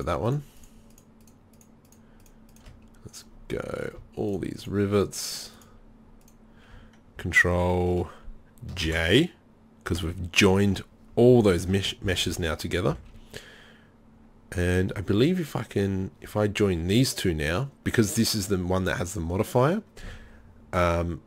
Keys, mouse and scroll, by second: 8.8 ctrl+j, 11.6 Tab, 12.1 a, 12.3 a, 12.9 a, 15.8-21.2 drag.